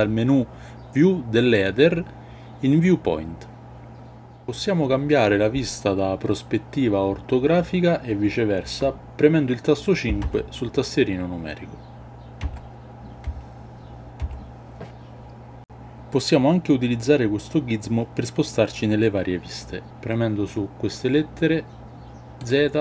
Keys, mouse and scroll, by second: 1.6-8.5 drag, 10.2 KP_5, 12.3 KP_5, 13.2 KP_5, 14.1 KP_5, 22.3 click.